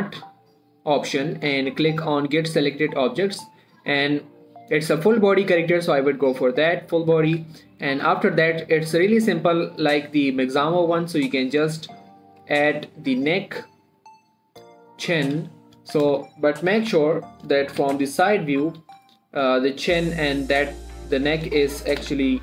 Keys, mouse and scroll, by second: 1.3 typing, 2.9 click, 4.4 click, 6.8 click, 6.8 typing, 7.9 shift+middle click, 8.2 scroll up 1, 8.6 shift+middle click, 8.8-9.2 shift+scroll up 1, 9.9 click, 13.7 click, 15.5-17.4 typing, 19.0 shift+middle click, 19.1 shift+scroll up 1, 19.2 g, 20.0 click, 21.2 g, 21.7 click.